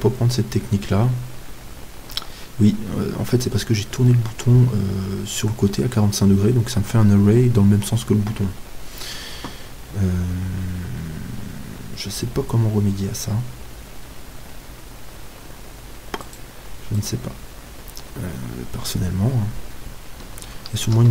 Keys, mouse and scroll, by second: 1.5-5.6 middle drag, 2.2 z, 16.2-18.9 right drag, 18.2 middle click, 18.9-20.8 scroll down 1, 20.8-21.1 middle drag, 20.8 shift+d.